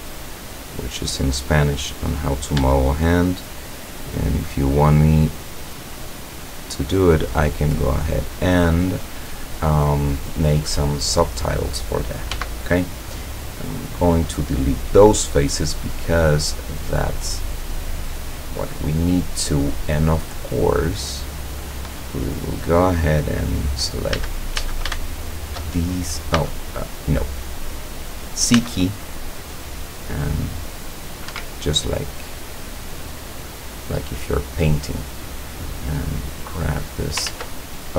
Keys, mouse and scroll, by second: 0.1 shift+right click, 0.9 shift+right click, 1.5 shift+right click, 1.9 shift+right click, 2.3-2.7 shift+scroll up 1, 2.7-3.6 shift+middle drag, 4.6 shift+right click, 5.6 shift+right click, 7.7 shift+right click, 8.6 shift+scroll down 1, 9.2 middle click, 9.9 middle click, 10.1 scroll down 1, 10.7 scroll down 2, 11.0 middle click, 11.7 middle click, 12.4 x, 13.8 click, 14.4 scroll down 2, 14.8-16.2 middle drag, 16.6-17.8 middle drag, 19.6-21.1 drag, 21.1-21.6 scroll up 1, 23.5 click, 24.2 a, 25.1 alt+shift+right click, 25.8-26.4 alt+shift+scroll down 3, 26.4 a, 26.7-27.2 scroll up 2, 28.5 c, 29.4-31.4 drag, 31.4 Escape, 31.7-33.7 middle drag, 33.8 scroll down 2, 34.7 middle click, 35.8-37.3 drag, 37.3 ctrl+z.